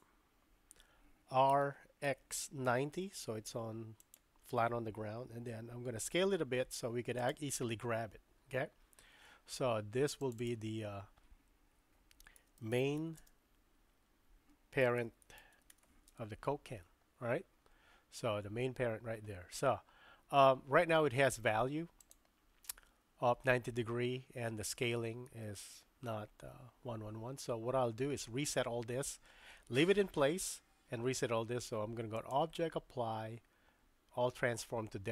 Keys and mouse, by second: 1.5 r, 6.0 s, 10.2 click, 10.4-17.7 drag, 32.1-35.1 drag.